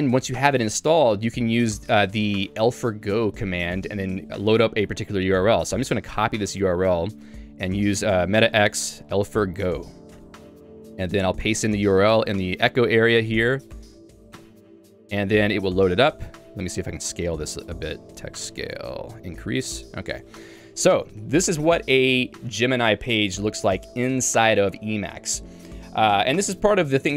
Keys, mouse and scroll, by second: 0.3 ctrl+s, 0.9-3.3 l, 6.5 y, 10.2 Return, 14.5 Return, 19.5 Return.